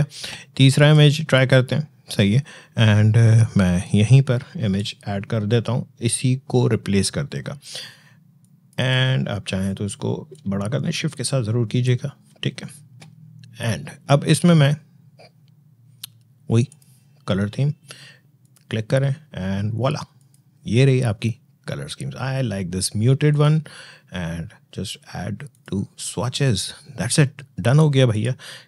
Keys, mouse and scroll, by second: 0.6 click, 3.6-7.0 drag, 8.2 click, 10.4-11.7 shift+drag, 16.5 click, 23.1 click.